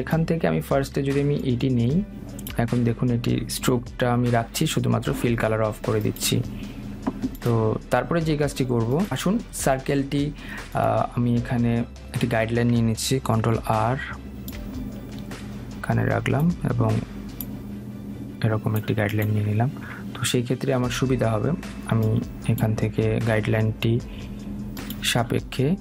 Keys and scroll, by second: 13.7 ctrl+r.